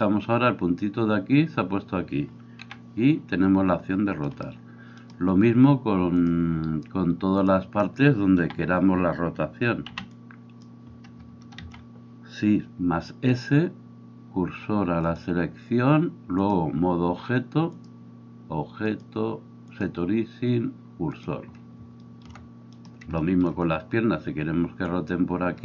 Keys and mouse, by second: 2.6 r, 8.4 a, 9.9 b, 11.7 shift+s.